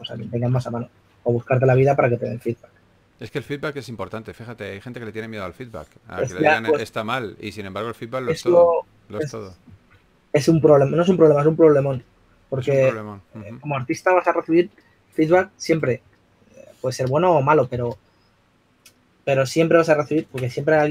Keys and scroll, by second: 1.9-2.9 typing, 4.2 typing, 5.9 super+z, 6.9-7.3 typing, 10.1-10.7 typing, 17.9 s.